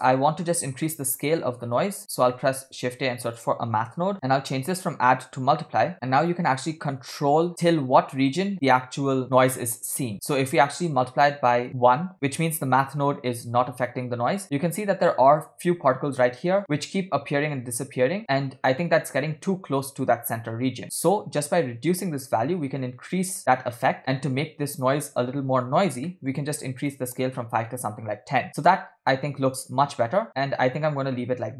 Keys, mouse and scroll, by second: 0.9 middle click, 1.4-1.8 scroll up 3, 2.1 scroll down 2, 2.4 shift+middle click, 2.7 shift+a, 4.8-12.2 drag, 14.4-14.9 scroll up 4, 16.5 space, 18.3 space, 18.7-19.5 scroll down 8, 20.3 scroll down 1, 20.4-21.0 scroll up 3, 21.4-23.5 shift+drag, 26.1 middle click, 26.9-28.1 drag, 28.8 space, 30.3-30.6 scroll down 3, 31.0 scroll down 1, 31.5 scroll up 3.